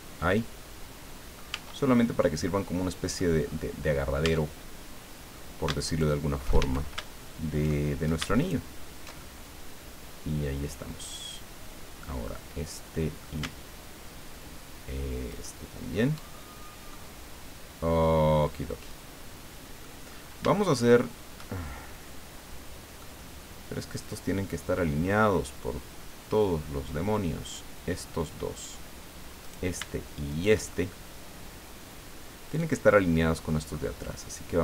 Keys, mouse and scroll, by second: 1.5 Tab, 2.5 click, 3.5 scroll up 1, 4.2 Tab, 5.8 alt+shift+right click, 6.6 alt+shift+a, 8.4 alt+shift+right click, 9.2-13.4 alt+shift+middle drag, 15.3 alt+shift+right click, 16.6 alt+shift+scroll down 1, 16.9-20.0 drag, 20.2 scroll up 1, 20.5-21.6 shift+drag, 23.0-28.6 drag, 29.4 right click, 30.3 shift+right click, 30.8-33.9 shift+middle drag.